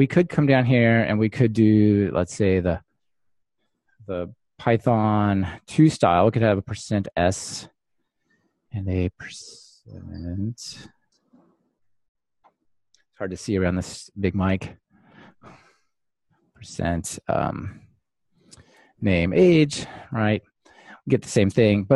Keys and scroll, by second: 20.1 ctrl+r.